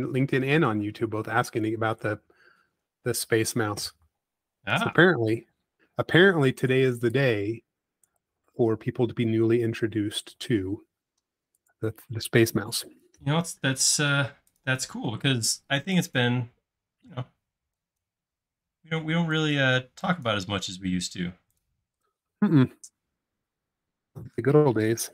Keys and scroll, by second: 2.4 space, 3.2 m, 6.6 p, 9.0 space, 11.8 l, 14.2 space, 15.7 typing, 20.8 space.